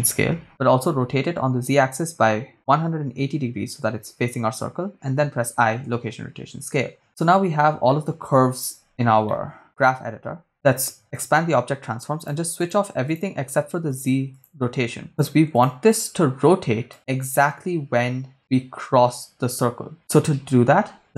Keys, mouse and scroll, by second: 0.7 r, 1.3 z, 2.7 1, 2.9 8, 2.9 0, 4.6 Return, 5.2 i, 7.2-7.8 scroll down 4, 7.9 middle click, 8.4-9.3 scroll down 3, 9.3 ctrl+middle click, 10.1-10.5 scroll up 3, 11.2 click, 12.4 click, 12.7 click, 13.1 click, 14.2 click, 14.7 click, 14.9-15.2 scroll down 2, 15.3 click, 15.7 click, 16.0 click, 16.9-20.0 drag, 21.0 right click.